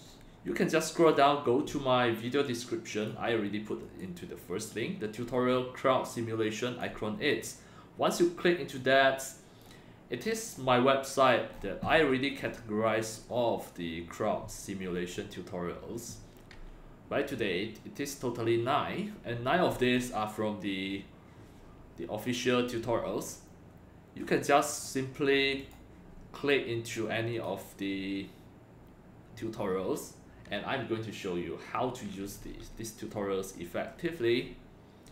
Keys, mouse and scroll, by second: 0.1 scroll down 1, 1.1 click, 2.4-3.0 drag, 3.8 click, 4.6 click, 6.1 click, 7.4 click, 8.8 click, 10.2 click, 12.4 scroll down 1, 13.2 scroll down 1, 15.4 scroll down 1, 17.0-17.6 scroll down 2, 18.2 scroll up 1, 24.2 scroll down 1, 25.0-25.5 right drag, 25.6 click, 27.4 click, 33.1 scroll down 1, 33.9-34.6 scroll down 2.